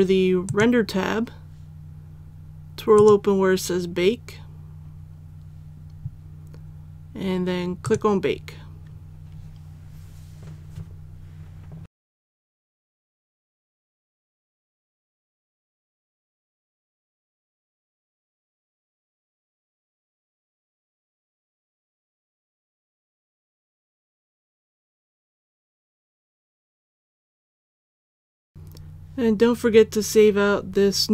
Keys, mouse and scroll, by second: 0.4 click, 4.0-7.8 scroll down 1, 7.8 click.